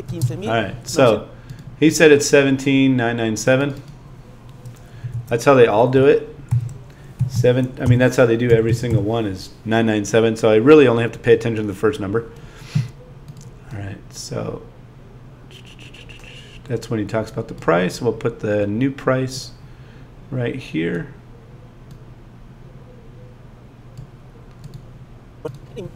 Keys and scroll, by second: 0.1 space, 5.2 super+a.